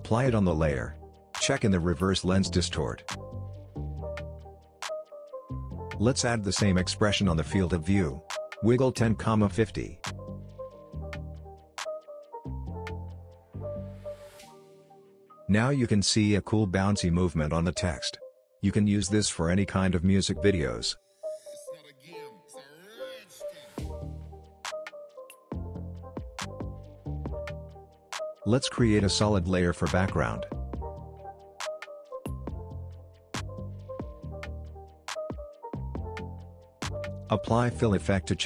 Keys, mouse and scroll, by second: 0.5-5.9 drag, 6.3 ctrl+z, 7.4 alt+click, 8.8-10.3 typing, 10.9 Return, 13.7 ,, 15.4 click, 16.5-16.9 click, 16.7 space, 23.7-24.3 scroll down 1, 24.3-24.9 scroll up 1, 24.9 space, 26.0-28.9 drag, 29.3 right click, 30.0 click, 33.2-34.2 typing, 35.0 Return, 36.4 click, 36.9-38.2 typing.